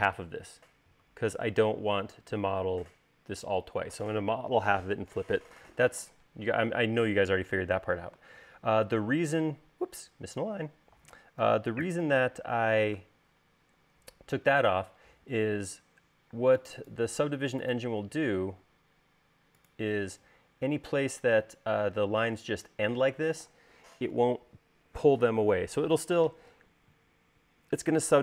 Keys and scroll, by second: 11.7-12.3 typing, 15.9 l, 20.3 space.